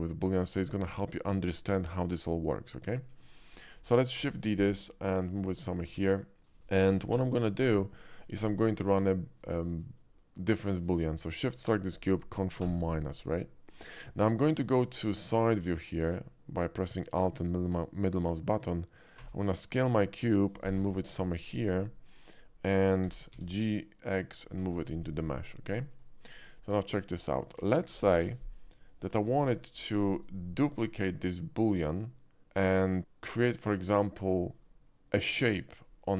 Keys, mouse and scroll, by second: 0.5 click, 3.2 shift+middle click, 4.1 shift+d, 5.2 click, 5.4 middle click, 5.8 s, 6.4 click, 6.5 middle click, 6.9 g, 7.1 x, 7.4 g, 7.6 click, 7.9-8.2 middle drag, 8.4 shift+middle drag, 9.0-9.3 shift+middle drag, 9.5 shift+middle drag, 10.0 shift+middle drag, 11.5 shift+click, 12.6 ctrl+KP_Subtract, 13.6 middle drag, 14.4 click, 15.0 alt+middle drag, 15.6 alt+middle click, 19.1 s, 20.2 click, 20.6 g, 20.8 y, 20.9 g, 21.6 click, 21.9-22.4 middle drag, 23.1 g, 23.3 x, 23.4 g, 24.2 click, 24.6 middle click, 25.0 middle drag, 25.4-25.7 alt+middle drag, 26.1 shift+middle click, 26.5-26.9 shift+middle drag, 27.2 shift+middle click, 27.9 g, 28.1 x, 28.3 g, 29.3 y, 30.2 click, 30.4 middle click, 30.7 middle drag, 31.1 middle click, 31.4-31.9 middle drag, 33.0-33.6 middle drag, 34.4 shift+middle click, 35.1 shift+middle drag.